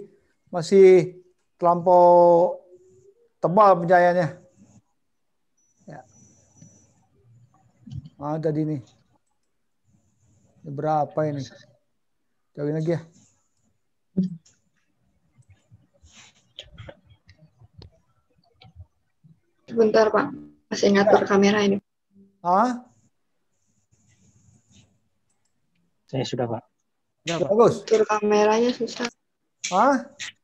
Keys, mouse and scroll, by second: 11.4 click, 14.6-15.0 click, 15.6 click.